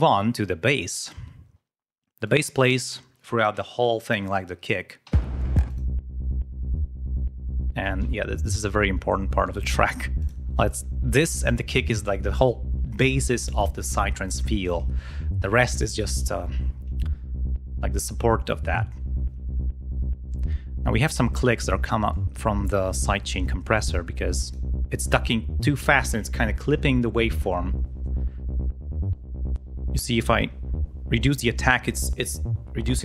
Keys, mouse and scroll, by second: 0.9 ctrl+scroll down 2, 2.1 click, 4.9 l, 5.6 click, 6.2 ctrl+scroll up 2, 10.1 click, 20.9 click, 22.0 click, 23.8 click, 28.5-30.0 drag.